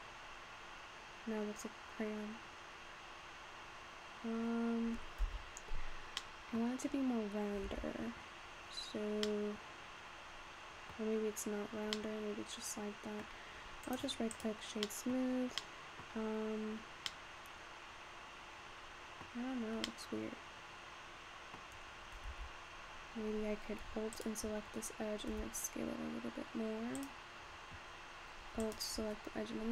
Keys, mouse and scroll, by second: 6.2 middle click, 7.1-7.7 scroll down 2, 7.7 Tab, 8.4-9.3 scroll down 1, 9.3-13.5 middle drag, 13.5-14.1 scroll up 1, 14.1-15.1 right drag, 15.1 middle click, 15.4 scroll up 2, 15.5 scroll down 1, 15.7 middle click, 16.4 scroll up 5, 17.3-19.4 middle drag, 19.4-21.6 scroll up 3, 21.6 middle click, 22.1-22.5 scroll down 3, 22.6 Tab, 24.5 alt+click, 25.5 s, 28.7 alt+click.